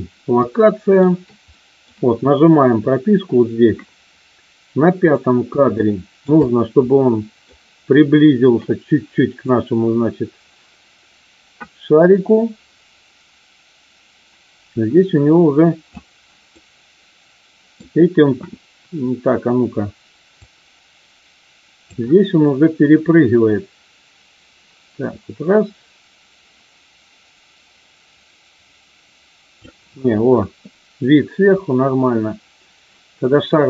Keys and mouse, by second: 0.6-0.9 shift+middle drag, 1.6 middle click, 5.1 click, 5.7-6.2 shift+middle drag, 6.4-7.4 middle drag, 9.6-15.8 drag, 16.6-17.7 middle drag, 20.3-21.9 drag, 23.2-29.6 drag.